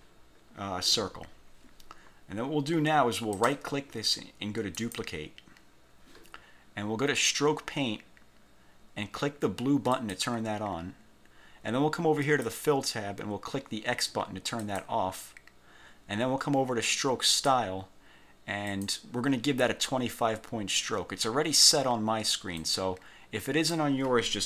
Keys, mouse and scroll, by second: 3.4 click, 4.8 click, 10.1 click, 12.4 click, 14.8 click, 17.4 click, 18.8 click, 22.8-24.0 drag.